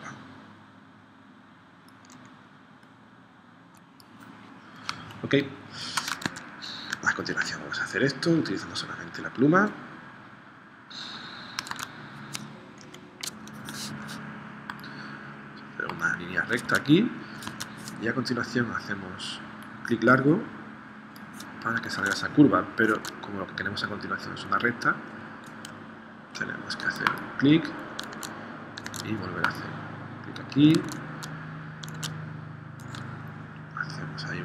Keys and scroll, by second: 4.9 space, 6.2 super+Tab, 11.8 super+Tab, 12.8 p, 16.6 super+Tab, 17.5 super+Tab, 22.0 super+Tab, 23.0 super+Tab, 28.1 super+Tab, 30.8 super+Tab, 32.0 super+Tab.